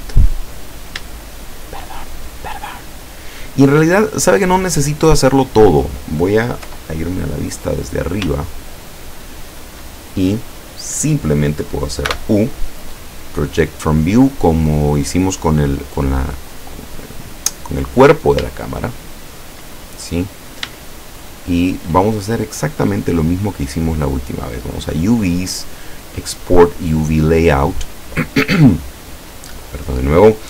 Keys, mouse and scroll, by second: 0.4-0.8 scroll up 1, 1.2-2.4 shift+middle drag, 6.7 KP_7, 7.6-8.3 scroll up 1, 8.5-9.7 shift+drag, 12.1 u, 14.5 click, 16.7-17.1 scroll up 2, 17.2 scroll down 2, 18.9 shift+click, 19.9 shift+scroll up 3, 20.8 shift+middle click, 24.7 click, 27.1 click, 28.7 click.